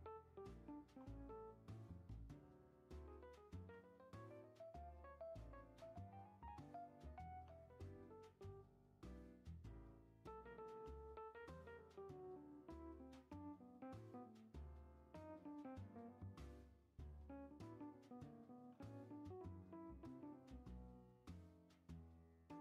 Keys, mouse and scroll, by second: 3.5 ctrl+a, 5.1 g, 6.9 click, 7.3 ctrl+a, 10.3 click, 10.6 ctrl+a, 16.1 e, 18.5 ctrl+a, 20.0 click, 20.5 ctrl+a, 22.3 e.